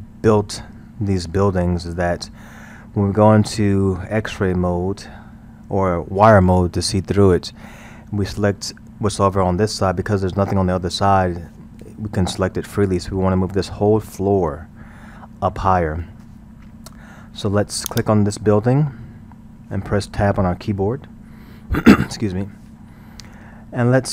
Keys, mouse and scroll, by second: 17.9 click, 20.8 Tab.